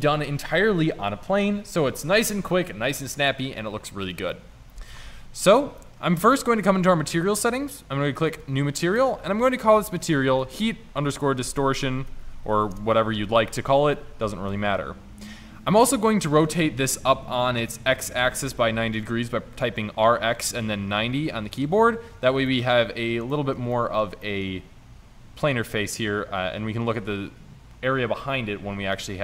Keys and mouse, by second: 5.1 middle click, 13.8-14.4 middle drag, 16.3 r, 21.9 click, 22.1 middle click.